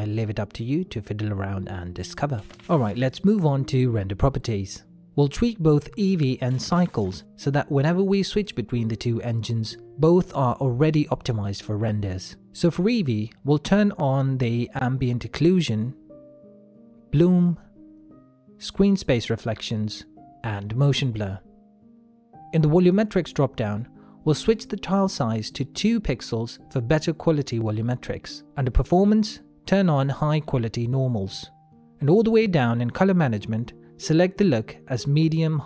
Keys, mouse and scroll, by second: 0.3 shift+middle click, 1.1 middle click, 7.0 click, 9.0 shift+middle click, 9.6 ctrl+middle click, 10.3 shift+middle click, 11.3 ctrl+middle click, 14.2 click, 24.3 middle click, 26.2 click, 28.9 middle click, 30.7 click, 31.2 middle click, 32.1 click, 32.6 middle click, 34.0 click, 34.4 middle click.